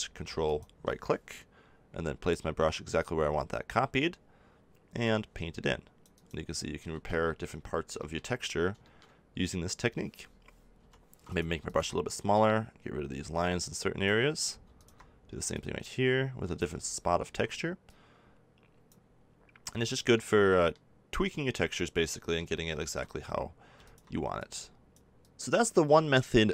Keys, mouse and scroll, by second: 0.4-6.9 drag, 6.9 ctrl+z, 7.5 click, 10.7 f, 17.3 middle click, 19.2 click, 19.7-23.4 middle drag, 23.5 middle click, 24.5 click.